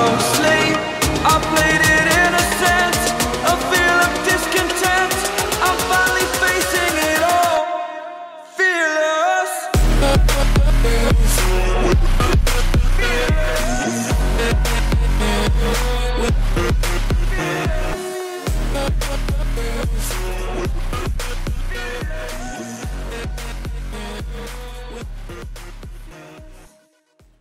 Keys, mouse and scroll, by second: 6.5 Delete, 7.4-11.8 drag, 14.0-18.8 drag, 19.9 click, 22.2 click, 24.2 click, 24.8-25.8 scroll up 1, 25.8 scroll down 1, 26.9 click.